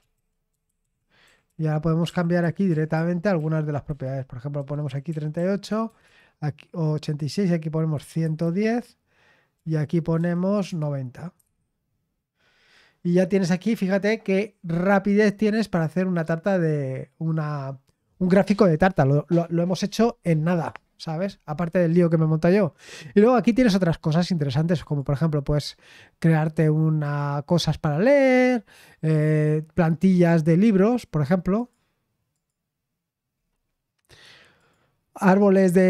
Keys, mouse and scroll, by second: 0.0-6.3 typing, 7.6-11.8 typing, 22.7-23.2 scroll down 1, 24.8 click, 25.9-27.0 scroll down 1, 27.0 click, 30.0 click, 31.5 click, 32.3 click, 33.3-33.7 scroll down 1, 34.5 click.